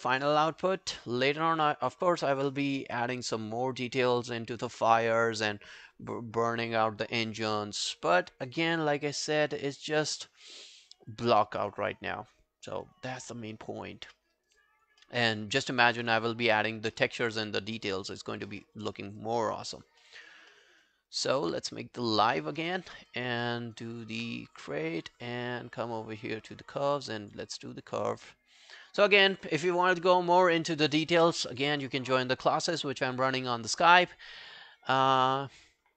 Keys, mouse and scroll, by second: 9.4 alt+middle click, 9.8 alt+scroll down 1, 10.1 alt+click, 10.5 alt+middle click, 10.7 alt+right click, 10.9 alt+click, 11.3 alt+middle click, 11.5 alt+right click, 11.7 alt+click, 12.1 alt+middle click, 12.5 alt+scroll down 1, 12.7 alt+right click, 13.0 alt+click, 13.3 alt+middle click, 13.6 alt+right click, 13.8 alt+click, 14.2 alt+middle click, 14.4 alt+right click, 14.6 alt+click, 15.1 alt+middle click, 15.5 alt+scroll down 1, 15.7 alt+click, 17.0 alt+middle click, 17.2 alt+right click, 17.4 alt+click, 17.8 alt+middle click, 18.0 alt+right click, 18.2 alt+click, 18.6 alt+middle click, 19.0 alt+scroll down 1, 19.2 alt+click, 19.7 alt+right click, 20.0 alt+middle click, 20.5 alt+middle click, 20.9 alt+scroll down 1, 21.1 alt+click, 22.7 alt+middle click, 22.9 alt+right click, 23.1 alt+click, 23.5 alt+middle click, 23.7 alt+right click.